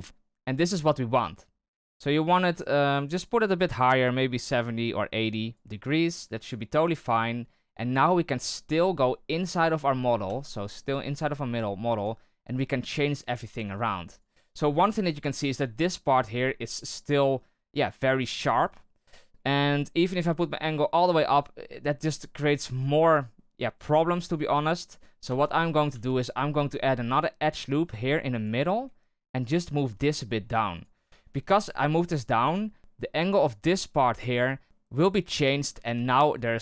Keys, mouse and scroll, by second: 4.1-6.9 drag, 6.9 right click, 9.3 Tab, 10.2 z, 11.0 right click, 11.4 g, 12.5 right click, 12.7 g, 13.6 right click, 13.8 g, 14.3 z, 20.0-25.2 drag, 25.2 z, 25.8 z, 27.7 ctrl+r, 29.5 right click, 29.7 g, 31.0 z, 32.8 shift+right click, 35.6 z, 36.3 right click.